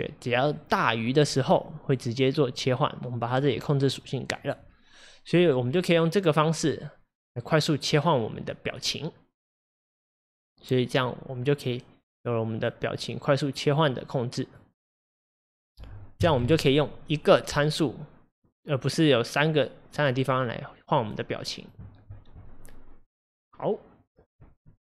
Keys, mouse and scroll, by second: 0.6-14.1 drag, 15.1-24.9 drag.